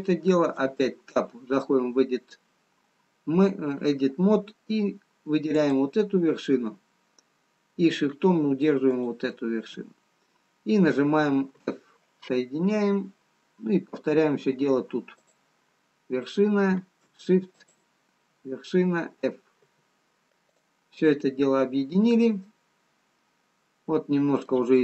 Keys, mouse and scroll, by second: 1.0 Tab, 3.1-4.2 scroll up 1, 6.0 click, 9.4 shift+click, 12.0 f, 13.8-14.9 scroll up 1, 14.9 scroll down 1, 15.6 click, 18.0 shift+click, 20.1 f, 21.0 click, 21.5-22.0 scroll down 1, 22.9 middle click.